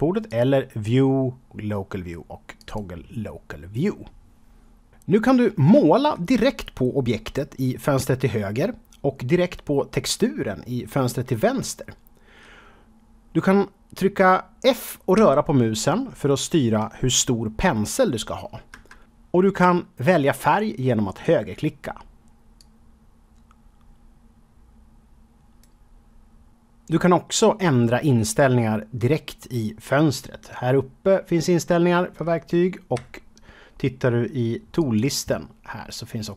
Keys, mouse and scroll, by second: 0.2 click, 2.5 click, 15.1 f, 18.7 Escape, 21.0 right click, 22.5-25.7 drag, 32.9 n, 34.7 click, 36.1-36.3 scroll down 1.